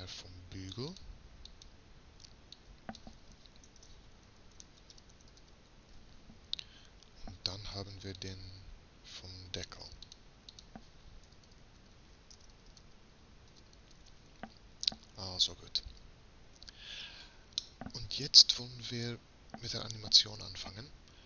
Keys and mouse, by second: 8.2-11.5 drag, 11.5 BackSpace, 16.6 Tab, 17.6 click, 19.2 click.